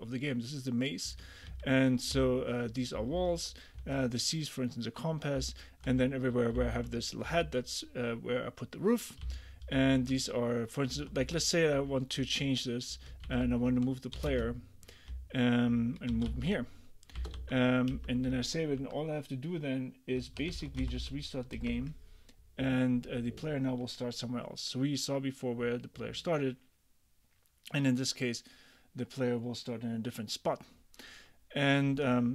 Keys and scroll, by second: 1.2 ctrl+d, 2.2 k, 3.0 j, 3.8 h, 5.4 h, 6.0 j, 6.6 k, 7.3 j, 9.3 k, 11.0-17.9 typing, 18.0 Return, 18.8 super+`, 20.6 ctrl+k, 20.8 j, 21.6 Return.